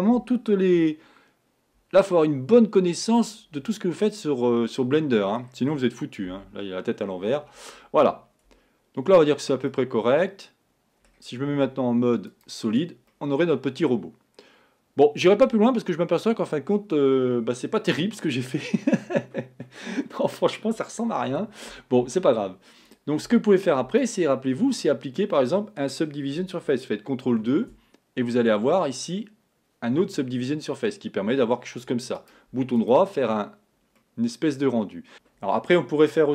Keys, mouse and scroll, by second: 0.2 s, 3.7-6.4 middle drag, 6.4 KP_1, 8.6 Tab, 9.7-11.6 middle drag, 11.6 z, 13.2-16.2 middle drag, 23.0 click, 24.1 click, 27.4 ctrl+2, 28.4-31.5 middle drag, 32.3-34.1 right drag, 34.1-35.1 middle drag, 35.1 KP_1.